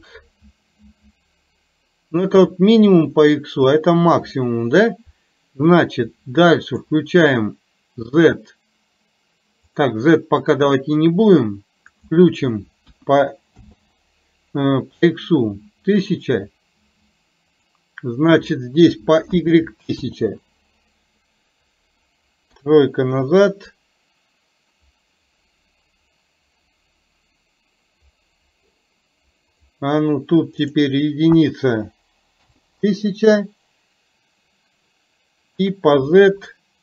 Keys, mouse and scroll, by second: 6.7 click, 12.0-13.7 drag, 17.5-20.0 drag, 22.6 KP_3, 29.6 click, 30.7-32.5 drag, 36.2-36.8 drag.